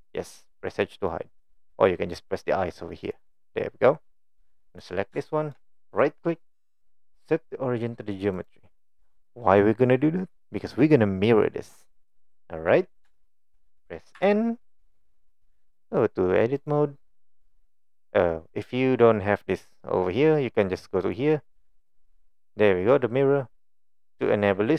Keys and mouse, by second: 0.8-1.1 middle drag, 3.1 click, 3.4 click, 5.2-5.6 shift+middle drag, 6.1-8.5 right drag, 9.9-10.4 middle drag, 11.9-12.2 middle drag, 12.5 middle click, 13.2 shift+middle drag, 14.2 n, 21.0-23.7 drag.